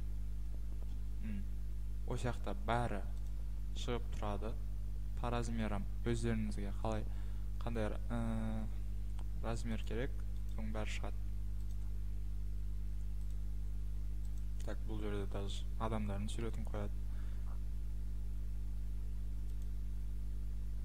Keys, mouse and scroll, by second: 9.9 click, 9.9-10.5 scroll down 1, 10.5 click, 11.7 click, 13.3 click, 14.4 click, 17.4-17.9 scroll, 17.9-18.9 scroll, 18.9-19.5 scroll, 19.6 click, 19.6-20.3 scroll down 6.